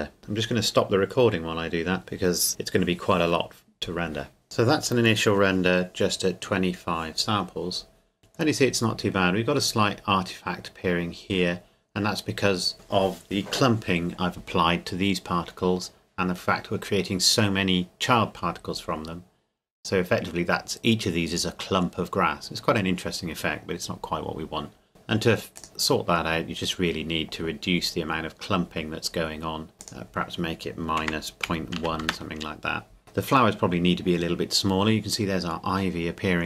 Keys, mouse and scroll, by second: 4.4 click, 9.2 scroll up 1, 25.6 click, 29.8 click, 31.0 KP_Subtract, 31.4 KP_Decimal, 31.8 KP_1, 32.0 KP_Enter, 33.0-34.6 scroll down 1.